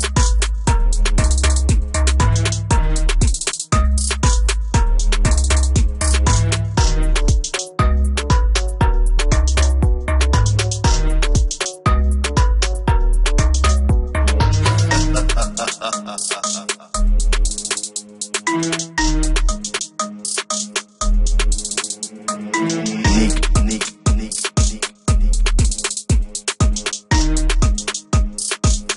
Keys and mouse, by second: 2.7 F1, 2.7 click, 3.0 click, 3.9 click, 8.1 click.